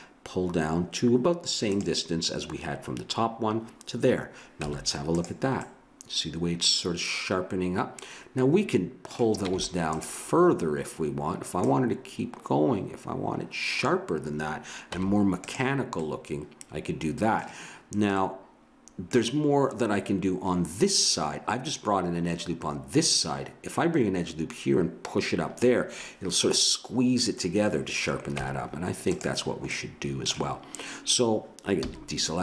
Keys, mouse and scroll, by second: 4.6 Tab, 6.1 middle click, 7.3-9.0 middle drag, 9.5 Tab, 11.6-13.4 drag, 14.9 Tab, 16.2-18.4 middle drag, 28.3 Tab, 31.8 a.